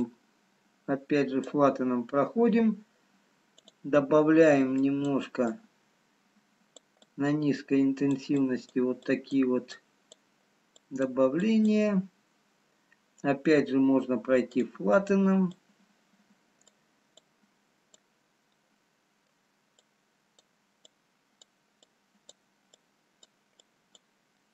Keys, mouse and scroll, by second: 0.7 click, 4.5 click, 5.4-14.7 click, 18.6 middle click, 20.2 click, 21.3 click.